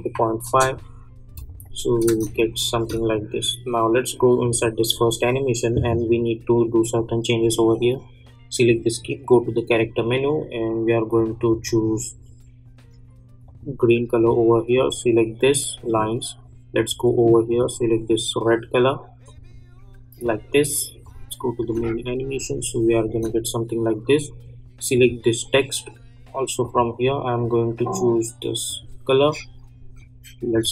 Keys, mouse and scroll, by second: 0.4 Return, 1.6 click, 2.0 space, 4.4 click, 6.9-19.2 drag, 21.9 space, 24.9 click.